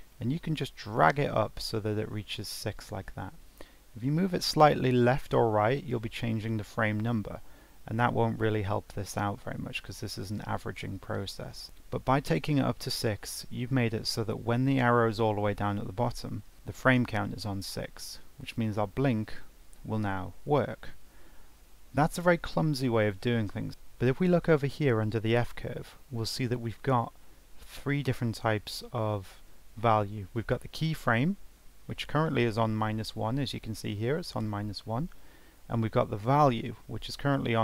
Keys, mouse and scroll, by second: 18.5-21.5 drag.